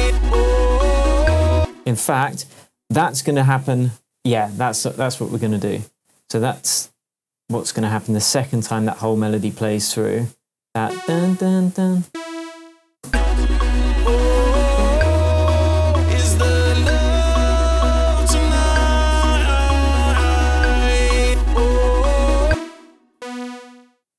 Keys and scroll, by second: 1.5 space, 3.2 super+d, 8.8 shift+super+j, 12.0 Down, 13.0 space, 15.3 Down, 22.4 space.